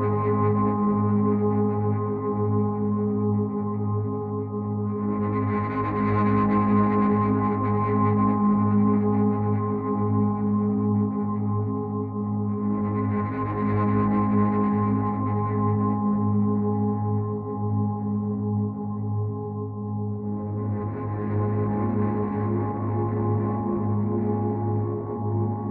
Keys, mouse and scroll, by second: 1.6 click, 2.7 click, 4.1 click, 5.6 click, 8.8 click, 10.1 click, 12.8 click, 16.6 click, 21.3 click, 22.5 click.